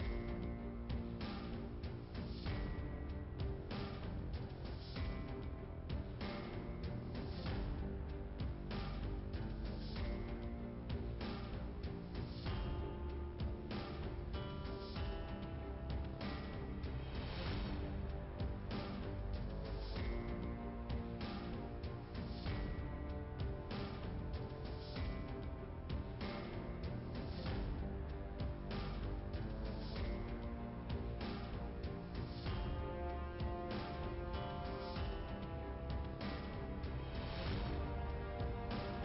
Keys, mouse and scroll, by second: 0.8 click, 3.1 click, 3.3 click, 4.1 click, 4.9 click, 5.4 click, 5.5 double click, 6.0 double click, 6.6 double click, 10.8 middle click, 12.0 click, 13.3 Delete, 13.4 click, 13.5 Delete, 13.8 click, 13.9 Delete, 14.1 click, 14.2 Delete, 14.9 middle click, 15.7 click, 18.9 right click, 19.1 click, 19.2 right click, 20.4 click, 20.8 click, 21.2 click, 21.3 double click, 21.7 double click, 22.8 middle click, 25.9 click, 26.4 click, 27.7 middle click, 29.6 click, 30.8 click, 31.7 middle click, 33.8 click, 34.4 click, 35.6 click, 36.3 ,, 37.1 click, 37.7 click, 38.5 click.